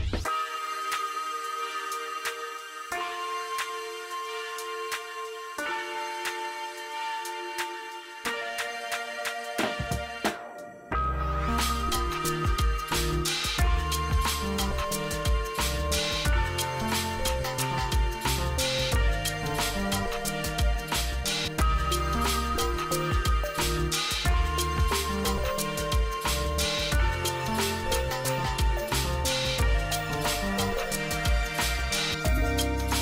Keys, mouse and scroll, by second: 0.0-0.7 typing, 1.0-2.5 drag, 3.1-4.0 typing, 4.3-6.2 drag, 6.7-7.6 typing, 7.7 click, 9.9 click, 13.0 ctrl+r, 13.7 click, 14.1 ctrl+r, 14.9 click, 16.0 ctrl+r, 16.6 click, 16.9 ctrl+r, 17.3-20.1 drag, 20.1 l, 21.3 scroll up 1, 22.3-25.2 drag, 27.4-29.5 drag, 30.4 e, 30.9 click, 31.5 scroll down 1, 32.8 F2.